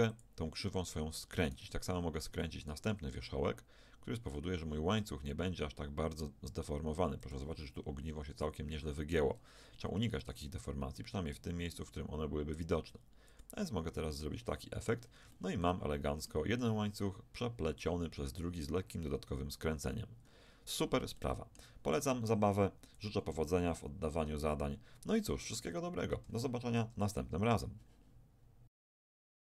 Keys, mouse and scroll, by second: 1.4-3.6 right drag, 2.7 ctrl+t, 9.1-11.1 right drag, 10.2 ctrl+t, 13.9 Tab, 14.3 middle click, 17.7 middle click, 20.2-24.0 middle drag, 23.0 KP_1, 24.6-28.2 middle drag.